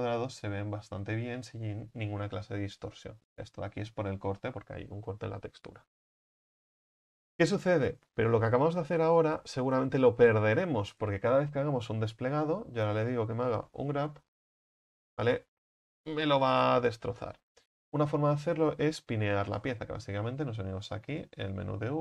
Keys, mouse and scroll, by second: 0.7-5.8 middle drag, 5.8 Tab, 7.9-12.5 scroll down 1, 12.5 a, 12.7 a, 14.6 u, 17.4 ctrl+z, 19.4 l.